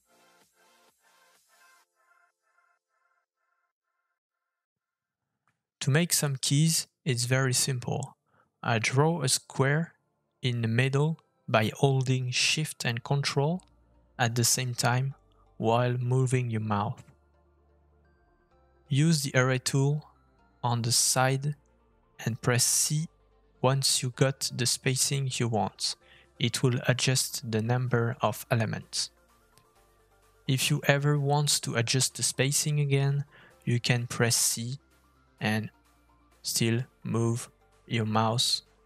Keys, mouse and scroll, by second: 1.6 middle click, 2.9-3.3 scroll up 2, 3.3 middle click, 3.8 scroll up 1, 4.1 click, 5.7 f, 7.7 middle click, 16.7 middle click, 17.1-17.5 scroll up 2, 17.5 shift+middle click.